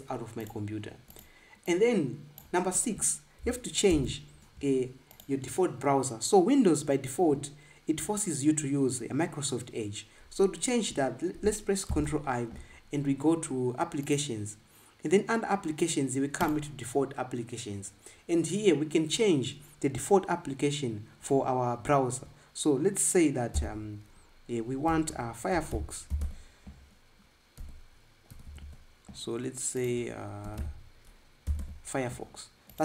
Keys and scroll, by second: 4.7 ctrl+b, 12.7 super+i, 24.3 b, 25.4-27.9 typing, 30.5-32.4 typing.